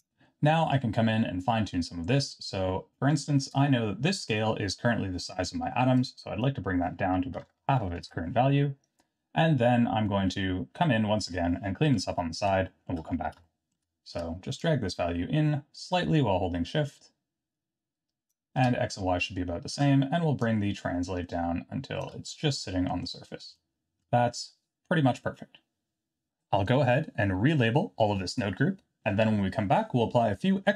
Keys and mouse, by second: 6.0-8.6 drag, 11.8 KP_3, 12.6 shift+middle drag, 13.4 shift+middle click, 14.8-18.3 shift+drag, 20.6-22.1 shift+drag, 22.6-22.9 middle drag, 23.5-24.0 shift+middle drag.